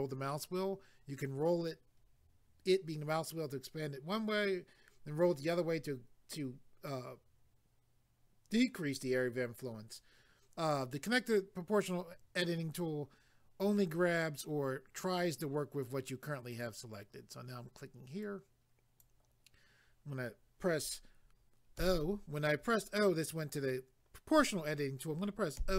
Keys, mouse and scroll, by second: 16.5 click, 18.2 click.